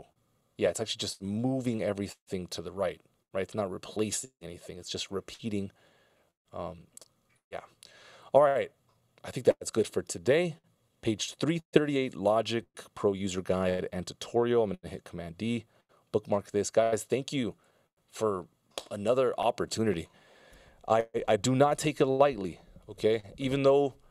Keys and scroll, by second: 2.6 super+z, 6.7 c, 9.7 super+s, 14.0 super+s, 15.0 super+d.